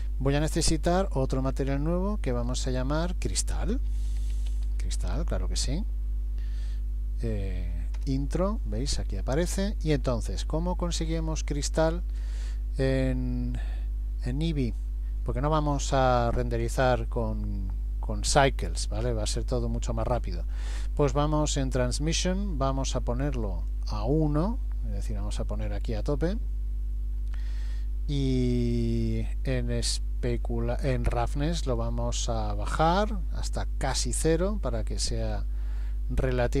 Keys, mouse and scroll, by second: 1.4 click, 2.4 click, 9.5-10.9 scroll down 6, 11.1-11.6 scroll down 2, 11.6-12.2 scroll down 1, 22.0 click, 31.8 click.